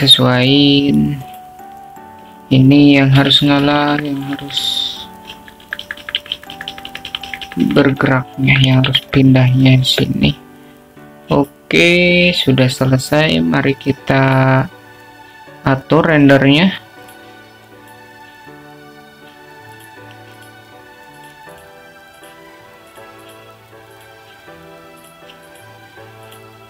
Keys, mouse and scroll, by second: 1.9 click, 3.3 click, 5.3 g, 13.5 click, 16.4 click, 18.3 click, 19.1-20.1 drag, 22.5 click, 23.3 drag, 23.7-24.4 drag, 25.3-26.6 drag.